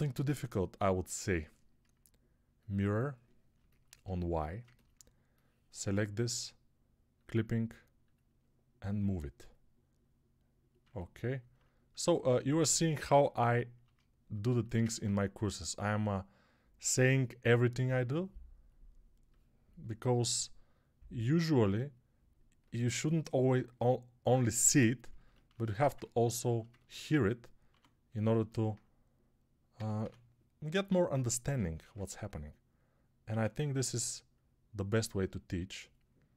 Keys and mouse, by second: 3.4-10.7 alt+middle drag, 10.7-14.4 ctrl+alt+drag, 12.9 ctrl+r, 14.4-15.9 alt+shift+middle drag, 15.9-28.2 drag, 27.6 2, 28.2-36.2 alt+middle drag, 29.6 e, 31.7 ctrl+r, 33.2 1, 36.2-36.3 drag.